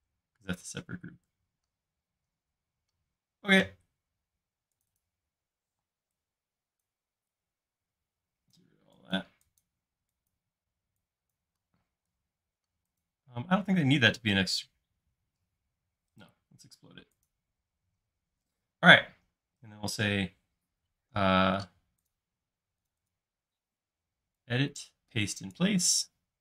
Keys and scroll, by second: 5.7 p, 6.8-7.6 typing, 11.9 space.